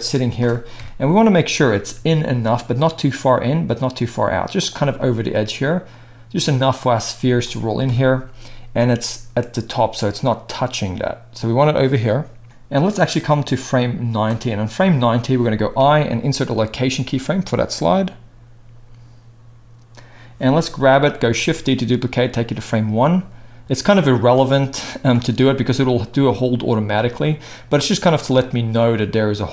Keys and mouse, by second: 0.7 KP_1, 1.9 g, 7.8 KP_0, 10.3-12.4 drag, 12.4-12.9 middle drag, 12.9-22.6 drag, 15.8 i, 21.3 shift+d, 22.6 middle click, 23.1-29.5 drag.